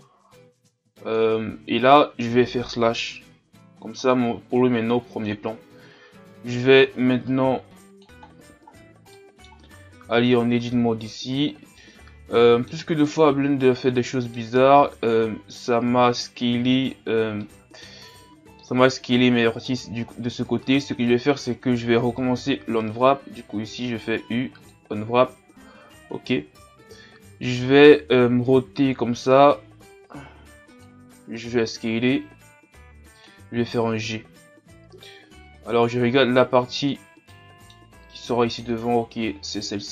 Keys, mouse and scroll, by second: 0.0-1.5 drag, 1.5-1.9 scroll down 2, 1.9-3.0 middle drag, 3.0 KP_Divide, 3.7-4.1 scroll down 1, 4.1-7.6 middle drag, 7.6 click, 8.2-9.5 scroll down 3, 9.5-10.2 scroll down 1, 10.2 Tab, 11.8-24.7 middle drag, 24.7 u, 28.6 r, 31.4 s, 33.6 g, 37.3-38.8 middle drag, 38.8-39.9 scroll up 1.